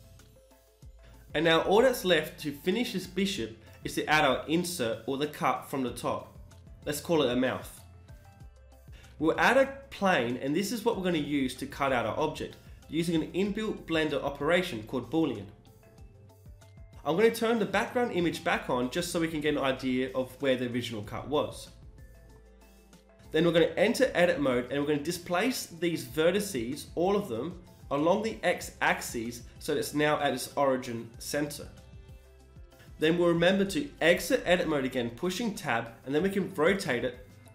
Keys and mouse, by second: 1.1 Tab, 2.4 KP_1, 5.6 middle click, 6.6 KP_1, 7.8 shift+a, 10.8 g, 15.2 n, 18.4-21.2 drag, 19.5 n, 20.6 z, 21.2 click, 21.3-23.3 middle drag, 22.1 g, 23.3 Tab, 24.3-25.6 drag, 24.6 b, 25.3 g, 27.3-28.5 middle drag, 27.9 e, 28.3 g, 33.9 Tab, 35.1 r.